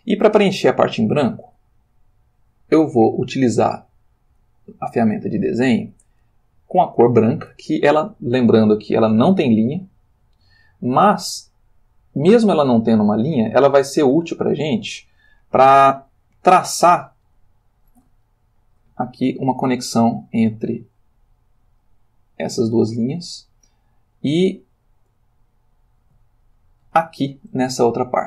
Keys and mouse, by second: 4.4 click, 6.0 click, 7.0 click, 9.0 click, 14.5 click, 16.0 ctrl+middle click, 17.2 shift+middle click, 18.8 ctrl+middle click, 20.4-23.3 drag, 24.6-25.7 ctrl+middle drag, 26.5-27.7 shift+middle drag.